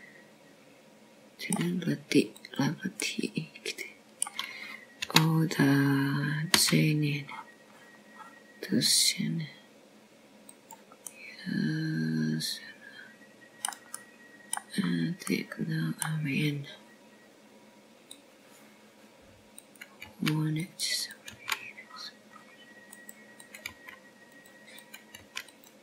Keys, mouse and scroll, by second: 1.8 middle click, 5.2 click, 5.9 middle click, 7.9 o, 9.4 g, 13.9 middle click, 16.8 middle click, 17.7-18.1 scroll up 3, 18.1 middle click, 20.9 click, 22.6 click, 22.9 g, 24.0 click, 24.2 g.